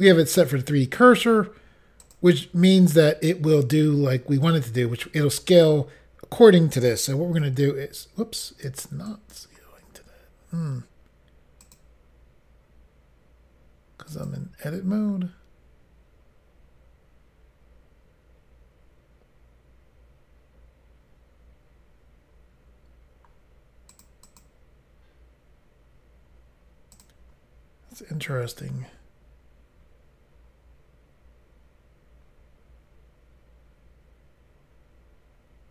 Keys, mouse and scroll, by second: 0.4 click, 9.1 right click, 11.6 click, 11.7 click, 14.1 click, 14.2 click, 23.9 click, 24.0 click, 24.3 click, 24.4 double click, 27.0 click, 27.1 click, 28.4 s.